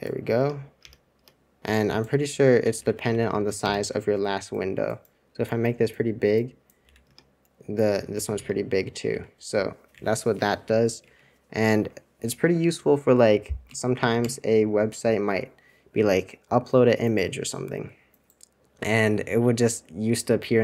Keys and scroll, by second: 0.3 super+Return, 1.1 super+Return, 2.1 super+c, 2.5 super+c, 2.7 super+c, 3.0 super+c, 3.6 super+Return, 6.9 super+c, 7.2 super+Return, 8.1 super+c, 8.3 super+Return, 9.0 super+c, 9.9 super+2, 11.0 super+1, 11.7 super+2, 13.6 ctrl+Tab, 14.2 ctrl+Tab.